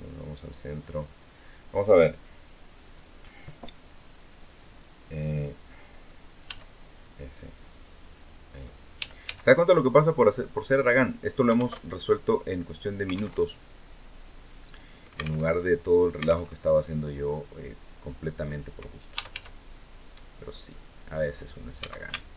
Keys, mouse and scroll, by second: 0.3 click, 6.2 s, 8.2 click, 8.7 e, 9.0 s, 10.3 click, 11.5 alt+Tab, 13.1 alt+Tab, 15.1 alt+Tab, 16.2 alt+Tab, 17.3-17.7 scroll up 2, 17.8 scroll down 2, 18.6-19.6 typing, 20.2 click, 20.8-21.2 scroll up 2, 21.5 a, 22.1 alt+shift+right click.